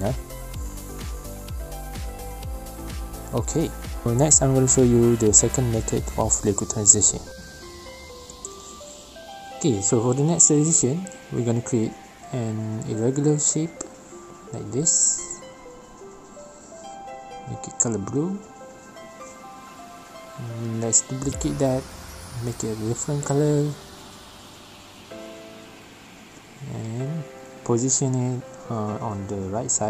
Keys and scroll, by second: 2.4 space, 4.5 space, 7.9 g, 17.2 ctrl+c, 17.4 ctrl+v, 19.1 ctrl+z, 22.8 ctrl+c, 22.9 ctrl+v, 27.0 v.